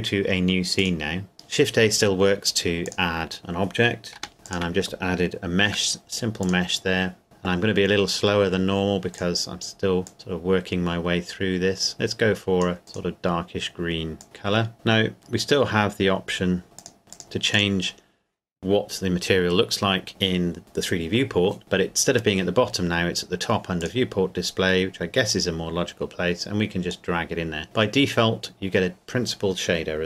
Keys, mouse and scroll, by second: 0.8 click, 1.3 shift+a, 2.8 click, 4.2 g, 4.4 click, 5.6 s, 6.4 click, 14.6-15.2 scroll down 1, 15.2 click, 15.4-16.6 scroll down 1, 16.6 scroll up 1, 16.8 click, 17.1 click, 23.8 click.